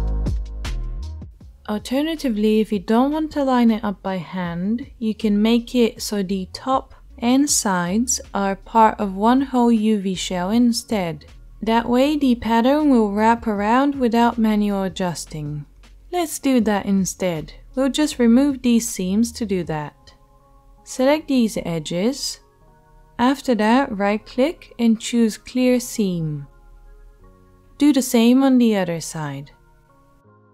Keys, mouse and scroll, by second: 0.9-20.6 right drag, 20.2 2, 20.6 middle click, 20.7-27.5 shift+right drag, 27.5-30.5 middle drag.